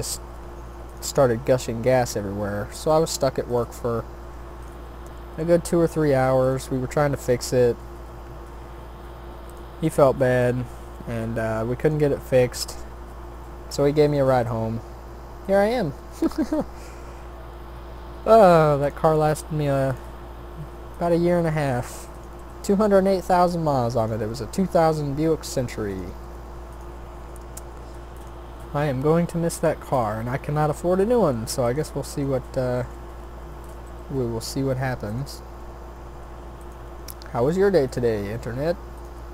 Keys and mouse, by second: 0.2 r, 1.3 s, 2.9 g, 3.8 s, 5.9-7.9 drag, 7.7 shift+d, 9.8 r, 10.9 e, 12.0 s, 14.3 g, 16.0 s, 17.0 e, 19.2 r, 20.1 e, 21.5 s, 22.3 g, 24.3 e, 26.2 s, 27.0 e, 28.6 s, 31.7-32.8 drag, 32.8 shift+d, 33.8 r, 35.2 e, 36.9 s, 38.0 e, 39.2 s.